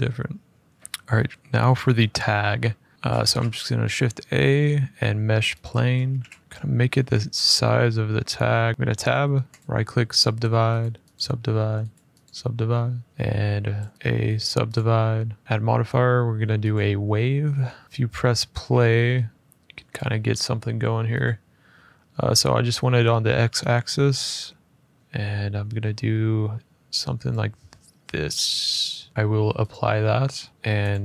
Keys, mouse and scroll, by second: 0.6 middle click, 2.6 middle click, 2.9 scroll up 2, 2.9 a, 5.3 click, 5.8 f, 6.1 scroll up 2, 6.4 click, 6.4 s, 6.8 middle click, 7.5 middle click, 8.0 middle click, 8.6 shift+middle click, 8.6 scroll, 8.7 Tab, 8.7 middle click, 9.3 right click, 10.2 click, 10.5 right click, 10.9 click, 11.7 right click, 12.0 click, 13.0 click, 13.1 middle click, 13.1 right click, 13.2 Tab, 13.9 click, 13.9 a, 14.1 right click, 14.5 click, 15.1 scroll, 15.4 Tab, 15.4 click, 16.5 click, 17.3 scroll, 19.7 click, 21.1 click, 27.0 click, 29.1 middle click, 29.6 click, 30.2 middle click, 30.5 click, 30.6 click.